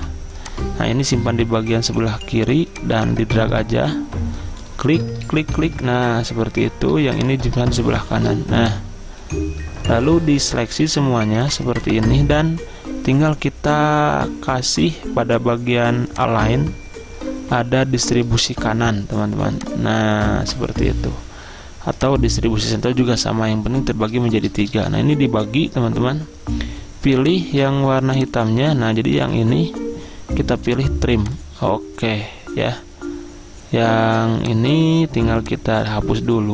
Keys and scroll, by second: 0.1 i, 2.9 i, 5.4 ctrl+d, 5.6 ctrl+d, 8.2 r, 29.3 ctrl+z.